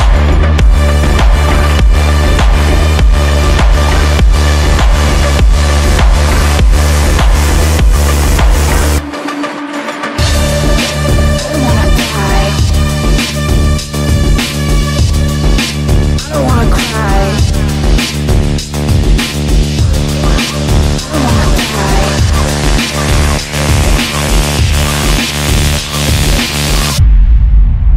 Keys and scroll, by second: 0.5 ctrl+k, 4.9 shift+F2, 5.2 Escape.